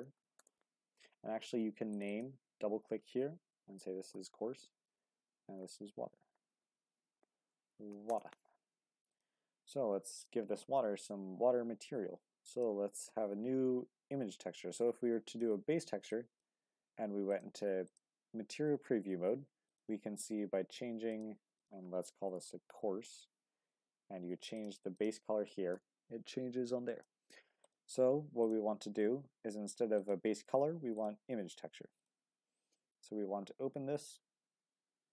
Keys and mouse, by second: 6.5-10.3 drag, 12.5-17.4 drag, 19.7 click, 21.1 click, 21.6-31.3 drag, 32.2-35.1 drag.